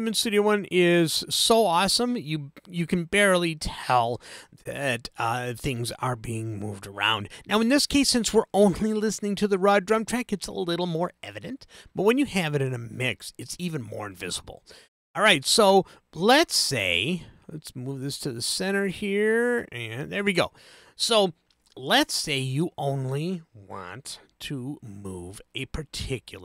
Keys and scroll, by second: 24.6 super+z.